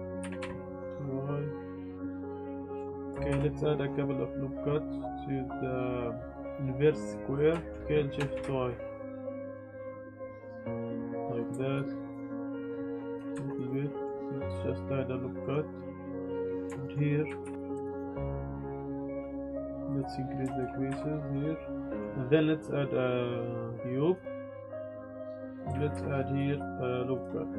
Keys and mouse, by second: 0.2 g, 0.4 y, 1.8 click, 1.9 shift+click, 2.0 z, 2.2 click, 2.3 z, 2.5 g, 2.6 y, 3.0 click, 3.1 Tab, 3.3 ctrl+r, 5.0 Tab, 5.0-7.2 drag, 5.0 z, 7.5 shift+click, 7.8 ctrl+z, 7.8 s, 8.3 shift+y, 11.2 click, 12.6 shift+y, 13.1 click, 13.3 Tab, 13.5 click, 13.6-14.0 middle drag, 14.2 ctrl+r, 16.5 Tab, 16.7 shift+click, 17.4 ctrl+r, 17.8 alt+click, 19.3 click, 20.6 shift+click, 20.9 Tab, 21.3-22.0 drag, 22.0 shift+a, 24.5 g, 24.6 y, 24.9 s, 25.2 click, 25.4 Tab, 25.5 click, 25.9 ctrl+r, 27.1 click.